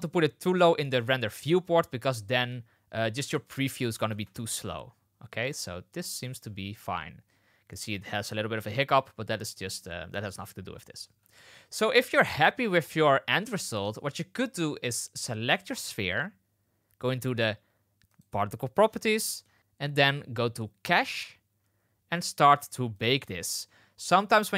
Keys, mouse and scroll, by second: 3.2 click, 4.0 space, 6.7 space, 8.5 space, 11.0 space, 15.6 click, 18.0 click, 20.9 click, 23.4 click.